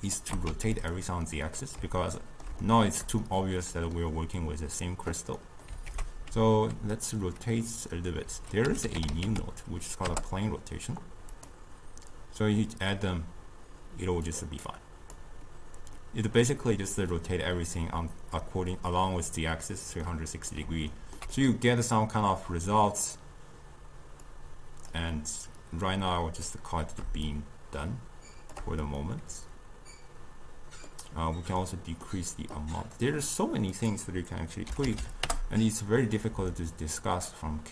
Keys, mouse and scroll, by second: 0.3 g, 1.3-5.9 middle drag, 5.9 ctrl+a, 14.3 click, 14.7-16.0 drag, 16.0-24.3 middle drag, 24.3-29.0 drag, 29.0-33.8 middle drag, 33.8-35.0 drag, 35.0 0, 36.6-37.7 middle drag.